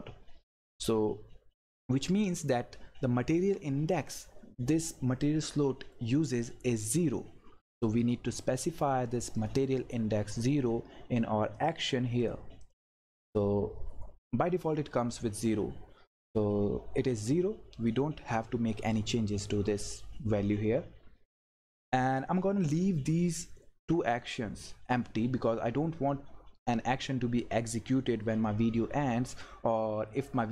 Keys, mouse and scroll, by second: 9.3 click.